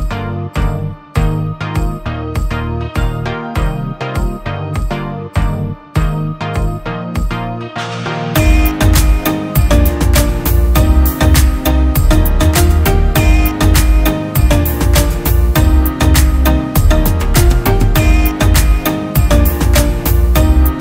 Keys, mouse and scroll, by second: 19.7 double click.